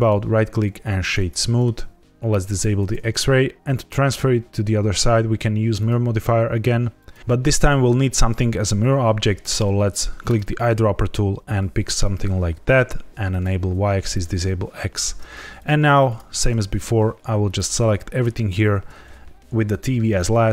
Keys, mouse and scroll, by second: 1.2 scroll up 1, 1.3 middle click, 1.7 z, 2.4 click, 5.7 click, 10.2 click, 13.2 click, 14.0 click, 15.5 shift+click, 16.0 shift+click, 16.6 scroll down 1, 17.4 shift+click, 18.1 shift+click.